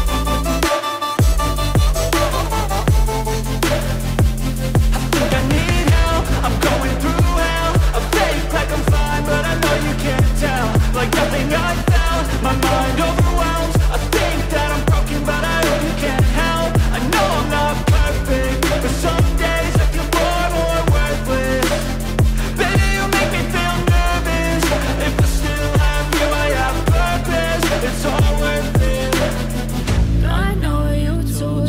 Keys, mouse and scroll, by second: 0.3 space, 2.1 space, 3.4 space, 3.9 space, 5.5-5.9 scroll up 1, 7.4 right click, 11.8 F3, 25.7 KP_0.